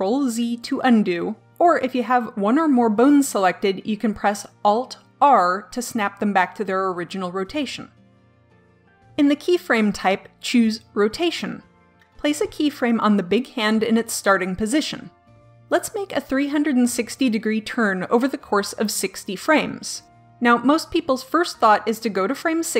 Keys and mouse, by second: 0.5 click, 5.2 alt+r, 9.7-11.5 drag, 14.2-16.9 drag, 21.2-22.7 drag.